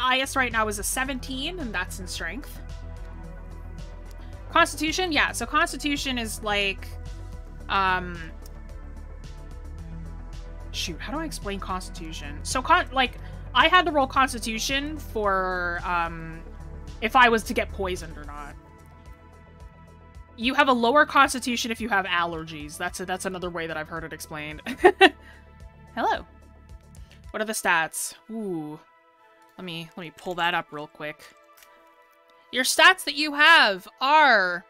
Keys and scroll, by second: 16.8 scroll down 1, 18.2-18.5 scroll up 1, 23.8 scroll down 1.